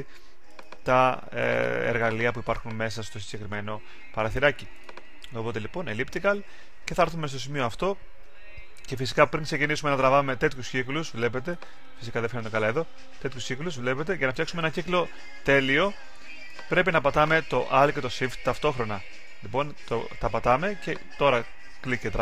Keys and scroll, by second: 11.9 super+z.